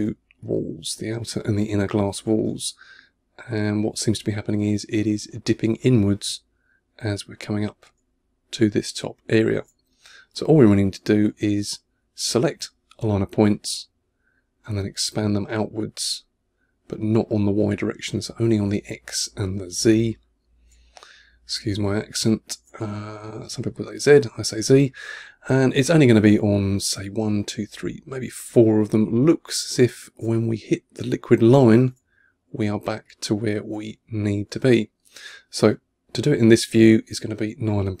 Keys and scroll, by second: 0.1 1, 2.4 3, 8.8 2, 9.7 1, 20.7 3, 21.7 2, 22.7 1, 28.6 1, 30.2 2, 32.8 2, 33.7 1.